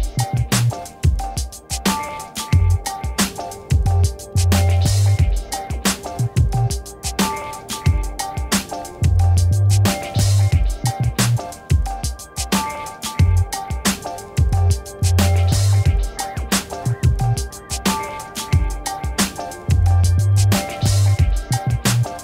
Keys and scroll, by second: 0.6 v, 2.0 ctrl+-, 5.1 z, 6.4 shift+Down, 7.4 v, 7.7 shift+Down, 8.3 Up, 10.2 ctrl+-, 19.1 a, 20.2 Return.